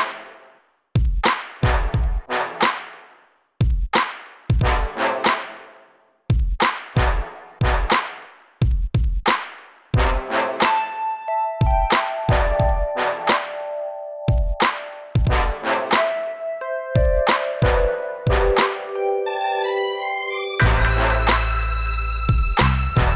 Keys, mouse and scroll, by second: 0.8 click, 1.0 click, 10.5 scroll down 2, 12.2 f, 12.7 scroll down 2, 13.6-13.9 scroll up 1, 14.9 click, 15.0 click, 16.0 middle click, 16.8 click, 20.0 alt+f, 20.3-20.6 scroll down 3, 21.3 scroll up 2.